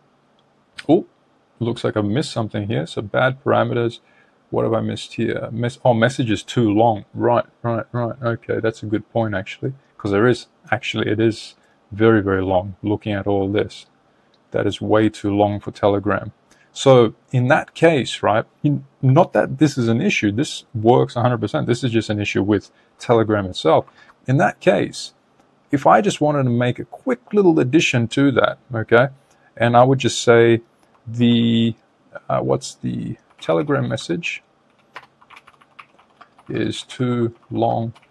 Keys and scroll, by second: 23.0 super+Tab, 34.8 BackSpace.